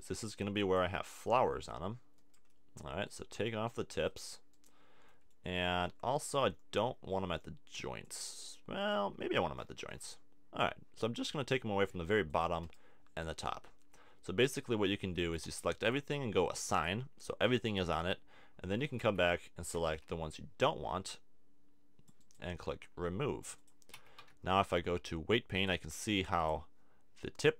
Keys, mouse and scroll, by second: 3.3 c, 7.1 c, 9.2 z, 12.0 c, 15.2 a, 15.5 a, 18.0 Tab, 18.8 Tab, 19.0 a, 19.9 c, 23.6 click, 23.9 a, 24.2 Tab, 25.6 click.